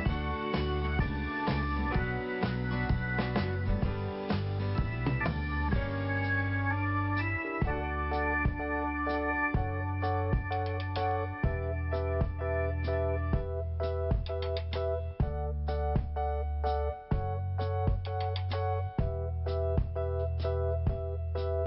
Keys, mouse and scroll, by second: 1.0 click, 1.9-2.4 scroll down 1, 2.5-3.0 scroll up 2, 7.2 click, 9.0 click, 10.3 click, 13.2 click, 14.8 click, 14.9 click, 15.7 click, 19.0 click, 19.2 click, 21.3 click, 21.4 click.